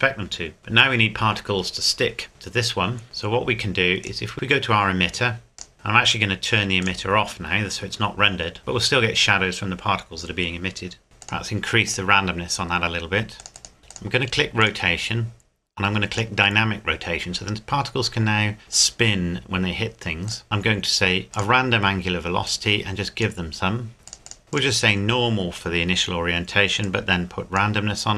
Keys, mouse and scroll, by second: 2.3 right click, 4.0 right click, 4.3-5.6 scroll down 1, 5.6 click, 5.7-6.8 scroll down 1, 6.8 click, 8.3 scroll up 1, 11.2 click, 13.8 scroll up 1, 13.9 click, 15.2-16.1 scroll down 1, 16.1 click, 20.3 click, 24.5 click, 26.8 click.